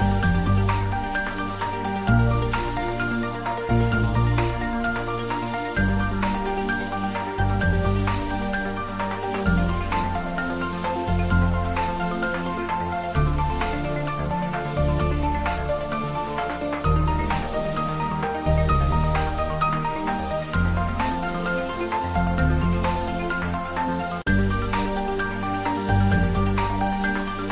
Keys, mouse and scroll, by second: 1.2 s, 1.8 click, 2.3 g, 3.5 click, 3.9 g, 4.4 s, 5.0 click, 5.4 y, 6.4 g, 7.3 click, 8.5 shift+middle click, 9.1-11.1 ctrl+middle drag, 11.1 s, 11.8 click, 12.5 g, 13.1 click, 14.0 r, 14.6 click, 15.8 click, 16.6 click, 18.7 click, 19.0 s, 20.3 click, 21.9 s, 23.3 y, 24.4 click, 25.1 r, 26.6 click, 26.9 middle click.